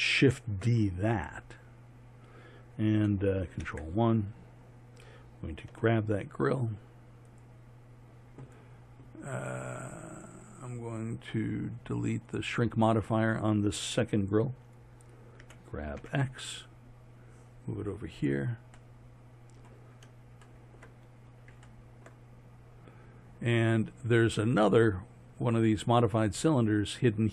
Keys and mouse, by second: 0.4 shift+d, 3.7 ctrl+KP_1, 5.8 g, 12.4-15.5 drag, 15.5 g, 24.5-27.3 drag.